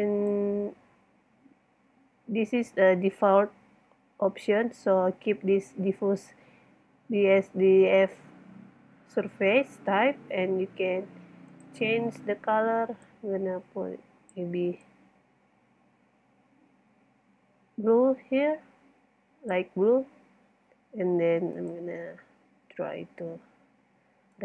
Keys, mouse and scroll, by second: 0.0 middle click, 2.7 middle click, 9.9-11.0 middle drag, 11.2-12.5 middle drag, 16.3-18.2 middle drag, 21.6 click, 21.7 click, 22.4 click.